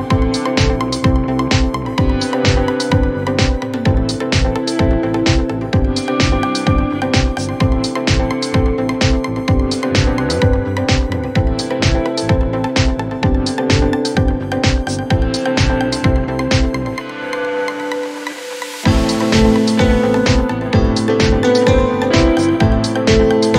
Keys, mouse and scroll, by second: 1.0 shift+middle click, 1.3-2.4 scroll up 1, 2.4 click, 4.5 shift+middle click, 5.0 scroll up 1, 6.0 click, 7.6 shift+middle click, 8.0-9.6 scroll up 1, 9.6 1, 10.2 click, 10.5 g, 15.7 click, 16.0 shift+middle click, 16.6 e, 18.9 g, 20.8 alt+click, 21.3 g.